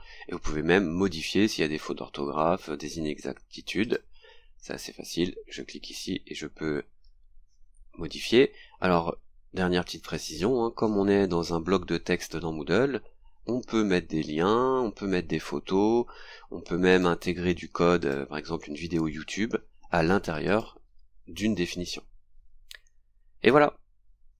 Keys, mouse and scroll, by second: 3.8 click, 6.3 scroll down 2, 16.9 click, 18.0 click, 20.4 click, 23.1 scroll down 2.